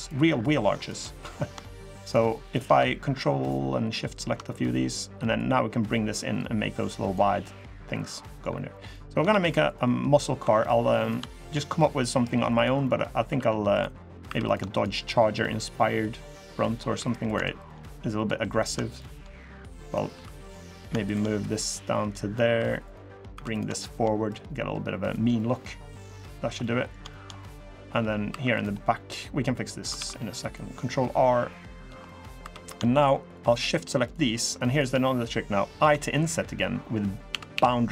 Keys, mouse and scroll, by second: 0.2 shift+click, 0.5 shift+click, 1.8 shift+click, 2.2 shift+click, 3.1 ctrl+click, 3.8 ctrl+click, 5.1 click, 7.3 middle click, 7.7 scroll down 1, 8.0 middle click, 8.7 middle click, 9.0 ctrl+r, 10.2 3, 10.7 click, 11.1 shift+click, 12.3 click, 12.6 middle click, 12.7 scroll up 1, 13.0 2, 13.5 click, 14.0 3, 14.2 click, 14.5 shift+click, 15.1 click, 16.2 middle click, 16.7 3, 17.0 click, 17.3 click, 18.3 click, 18.7 shift+click, 19.1 click, 19.9 2, 20.3 click, 20.8 shift+click, 21.4 click, 22.3 3, 22.6 click, 23.1 2, 23.3 click, 23.6 shift+click, 24.0 click, 25.1 middle click, 25.6 middle click, 25.8 scroll down 1, 26.0 2, 26.3 middle click, 26.8 shift+middle click, 27.1 middle click, 27.5 scroll up 1, 28.0 3, 28.3 click, 28.9 middle click, 29.7 ctrl+r, 31.8 middle click, 32.2 3, 32.4 click, 32.7 shift+click, 33.0 click, 33.3 shift+click, 33.5 shift+click, 33.8 shift+click, 34.1 shift+click, 34.4 shift+click, 34.8 middle click, 35.5 i.